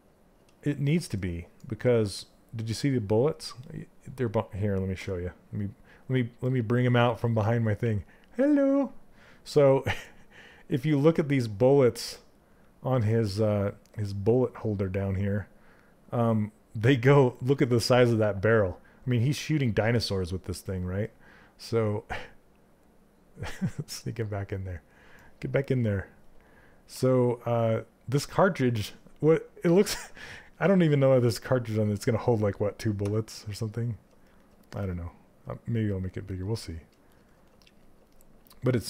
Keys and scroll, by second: 26.5 z, 32.5 q.